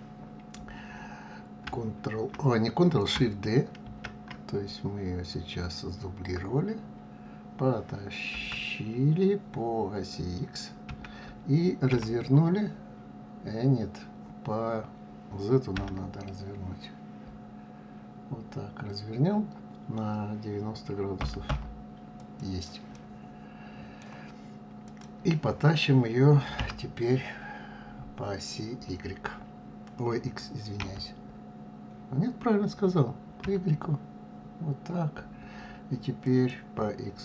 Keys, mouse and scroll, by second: 3.9 shift+d, 22.9-24.8 middle drag, 24.8 click, 26.6 g.